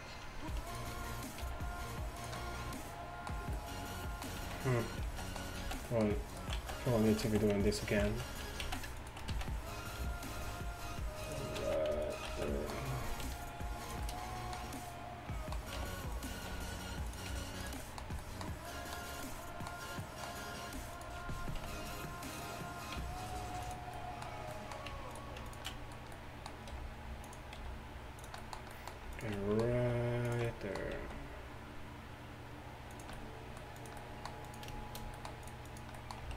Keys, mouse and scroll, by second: 1.5 g, 4.4-10.0 typing, 6.3-8.1 middle drag, 11.6 z, 12.3 z, 15.9 g, 16.5 r, 17.3 g, 21.0-23.0 right drag, 21.6 r, 23.0 g, 25.2-27.3 drag, 26.8 r, 27.6 g, 29.6 click, 29.8 alt+s, 31.0 alt+s.